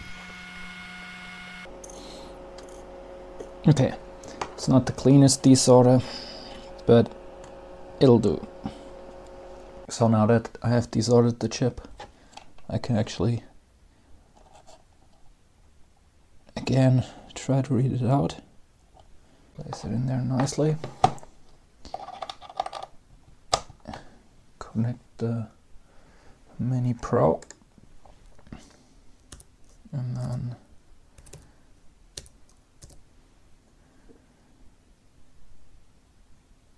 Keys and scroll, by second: 30.0 Return.